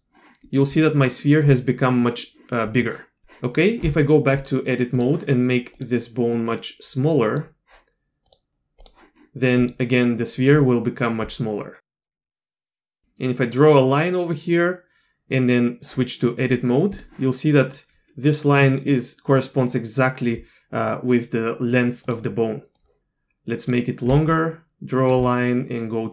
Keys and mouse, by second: 0.5 middle click, 1.0 middle click, 1.5 click, 2.0 click, 4.4-5.0 drag, 6.3-7.4 drag, 8.3-8.9 drag, 9.6 click, 12.2 KP_1, 12.7 d, 12.9 click, 16.5-17.0 drag, 22.8 click, 24.1 d, 24.3 click, 25.1 d.